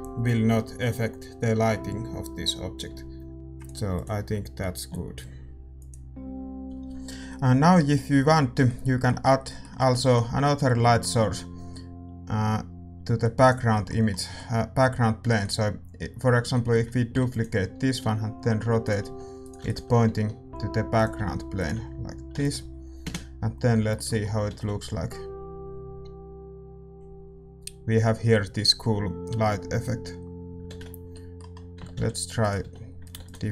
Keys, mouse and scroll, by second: 2.9 s, 3.3-8.6 ctrl+drag, 3.3 g, 3.3 s, 6.6 ctrl+s, 6.6-13.3 middle drag, 16.5-23.0 middle drag, 23.0 ctrl+s, 23.0 r, 23.0 g, 23.0 KP_0, 23.4-30.7 middle drag, 30.7 shift+z, 31.1-33.5 middle drag.